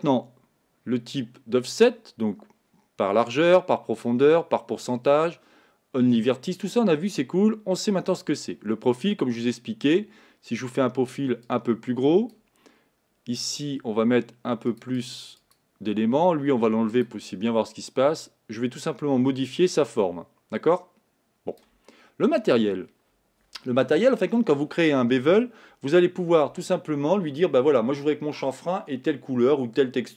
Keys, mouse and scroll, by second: 11.6-30.1 drag.